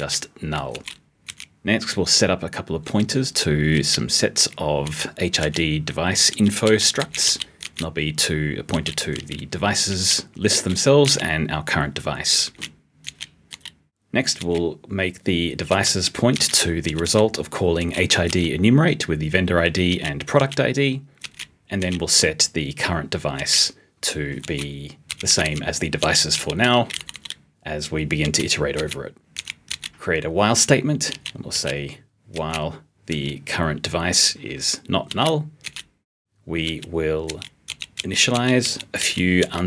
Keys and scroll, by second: 26.7 u, 29.3 s.